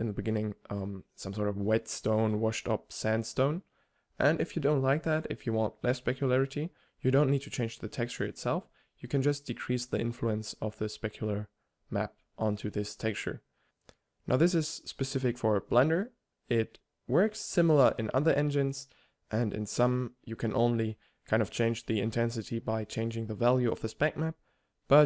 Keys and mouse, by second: 0.7-5.7 typing, 1.7 shift+Tab, 2.4 click, 5.2-5.7 drag, 6.7 click, 7.2 shift+d, 7.4-7.7 drag, 7.7 g, 8.1 middle click, 8.3 g, 11.1 middle click, 12.5-12.9 middle drag, 14.9 middle click, 15.2 middle click, 15.4 middle drag, 15.6 middle click, 15.8 middle drag, 16.2 middle drag, 16.7 shift+a, 18.6 n, 19.6-21.7 typing, 20.2 drag, 21.1 shift+Tab, 22.5 right click, 23.5 middle click, 23.9-24.9 drag.